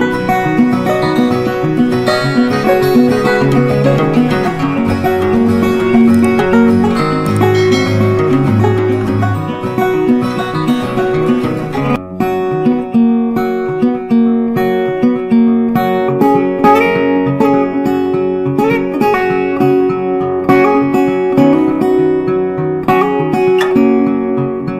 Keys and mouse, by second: 0.3 click, 1.4 right click, 3.1-10.7 drag, 10.7 ctrl+right click, 11.7-14.7 shift+drag, 14.7 right click, 16.0 ctrl+r, 19.9-24.7 drag.